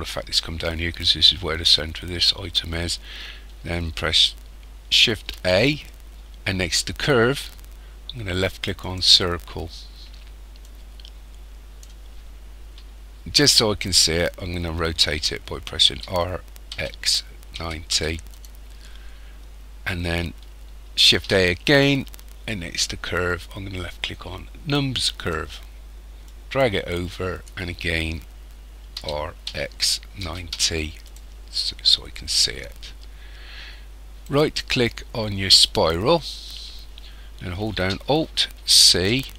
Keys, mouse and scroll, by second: 5.3 shift+a, 10.6 click, 15.9 r, 21.1 shift+a, 26.2 click, 29.0 r, 32.0-32.5 scroll up 3, 34.2 right click.